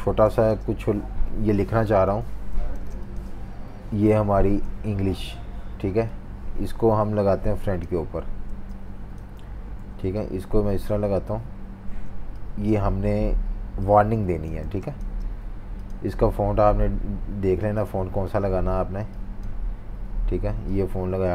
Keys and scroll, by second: 0.0-0.2 typing, 1.4 v, 1.9 super+-, 2.0 super+-, 2.2 super+-, 2.7 typing, 8.2-9.5 typing, 14.6 typing.